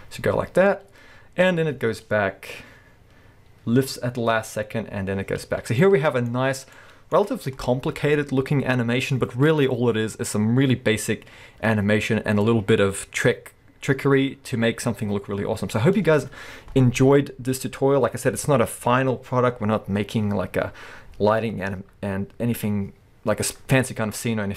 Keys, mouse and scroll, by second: 5.8-6.8 middle drag.